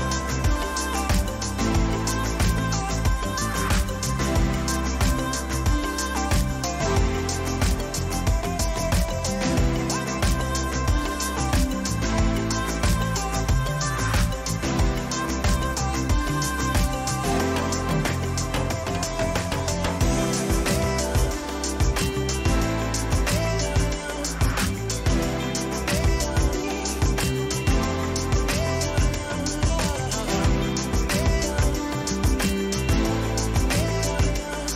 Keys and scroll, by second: 26.0 ctrl+j.